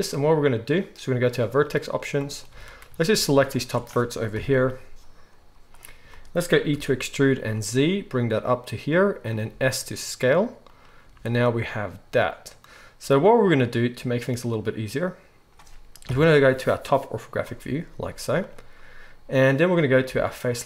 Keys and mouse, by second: 1.2-3.6 drag, 2.5 alt+a, 3.6-20.5 alt+shift+middle drag, 4.3 KP_1, 5.4 z, 6.7 e, 9.5 s, 11.0 z, 16.0 KP_7, 18.1 z, 20.5-20.6 drag.